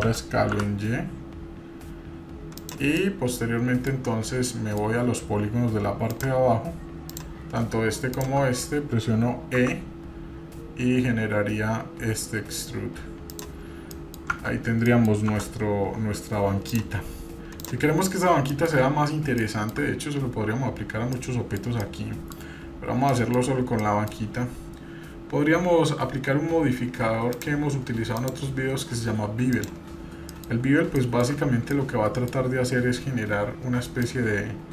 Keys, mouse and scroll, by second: 3.0-4.1 middle drag, 4.1 scroll up 1, 4.5 shift+middle click, 6.1 click, 7.1 click, 8.1 shift+click, 9.6 e, 13.6-14.0 scroll down 2, 13.9 middle click, 14.9 middle click, 15.3 Tab, 16.0-16.7 scroll down 1, 16.7 click, 17.1-17.6 scroll up 2, 17.6 click, 18.0 scroll up 1, 18.5 shift+middle click, 18.9-19.4 scroll up 1, 19.4 shift+middle click, 20.1-21.2 scroll down 3, 21.1 middle click, 21.8 shift+middle click, 22.7-23.0 scroll up 1, 23.1 shift+middle click, 23.8 middle click, 25.3-26.1 scroll down 2, 27.3 click, 28.1-29.7 drag, 30.3 middle click, 30.5 scroll up 1, 31.0 shift+middle click, 31.4 scroll up 1, 31.7-32.5 shift+middle drag, 34.0 click.